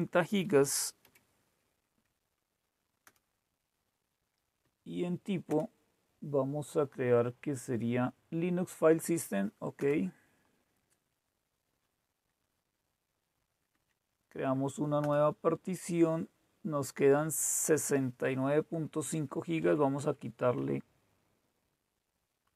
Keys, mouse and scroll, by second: 0.5-1.0 typing, 3.1 Return, 4.5 Right, 5.4 Return, 9.8 Return, 13.7 Down, 15.0 Return, 19.0 Left, 19.1 Left, 19.4 Left, 19.5 Left, 19.9 Left, 20.5 Right.